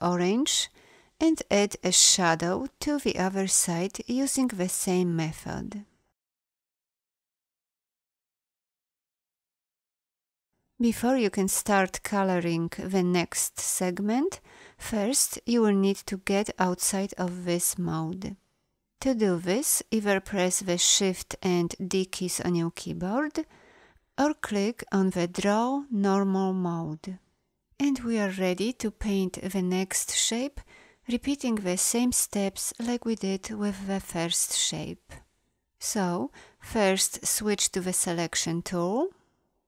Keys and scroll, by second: 37.2 a.